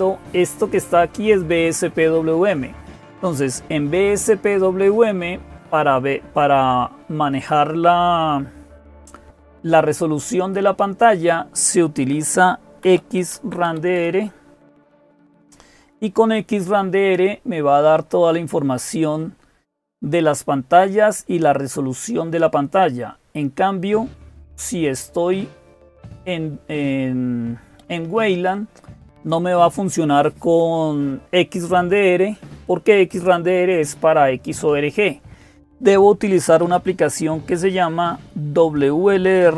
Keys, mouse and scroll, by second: 0.0-39.5 typing, 21.6-24.3 scroll down 1, 25.7 click, 28.1-29.8 drag.